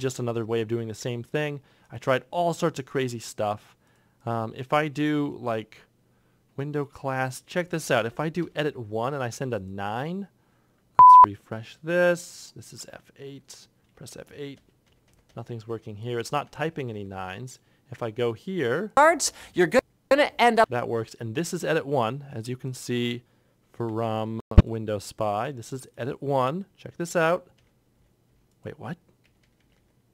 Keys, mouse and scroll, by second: 8.3 BackSpace, 14.2 BackSpace, 14.4 BackSpace, 14.5 F8, 14.7 F8, 15.0 F8, 15.6 F8, 17.0 F8, 18.9 F8, 19.7 F8, 27.8 F8, 29.1 F8.